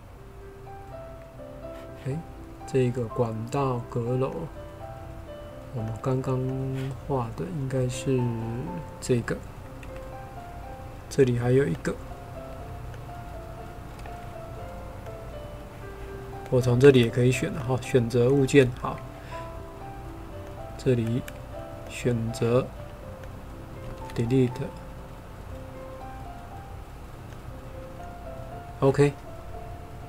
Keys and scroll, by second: 9.8 Delete, 18.4 Delete, 24.0 Delete, 27.9 Delete.